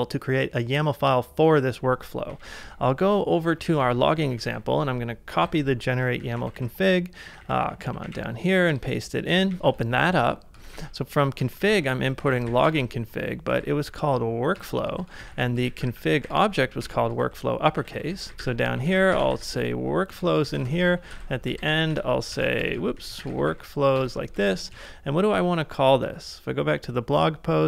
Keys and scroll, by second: 2.3-13.5 typing, 14.6 Return, 15.0-16.2 typing, 16.8 Return, 17.3 ctrl+c, 17.9-21.6 typing, 20.1 Return, 22.4 ctrl+c, 22.7-23.4 typing, 24.7 super+Tab.